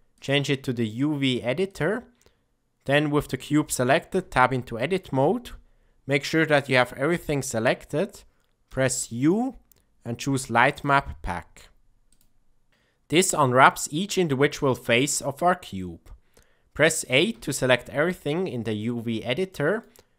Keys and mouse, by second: 0.1-1.7 drag, 4.0 Tab, 8.6 u, 17.2 a, 19.4-19.7 middle drag.